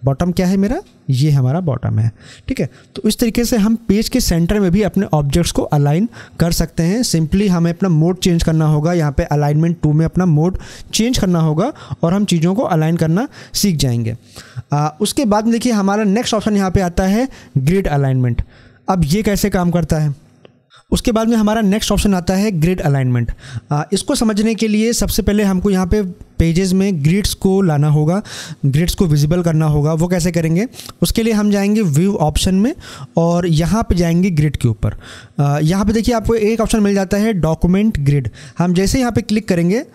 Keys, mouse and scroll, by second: 31.8 click, 39.1 click.